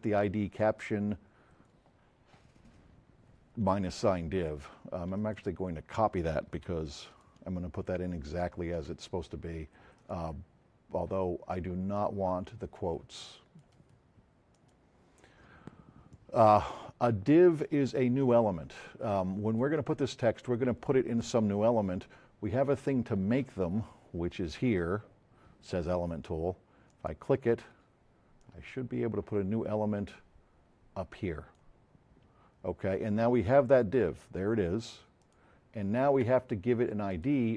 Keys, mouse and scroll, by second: 5.2 click, 5.2 z, 6.8 shift+click, 8.3 shift+click, 10.0 shift+click, 11.5-12.8 drag, 13.6 click, 13.7 right click, 14.5 click, 16.1 click, 18.3-19.7 drag, 30.1-31.7 drag, 35.2 click, 37.1 click.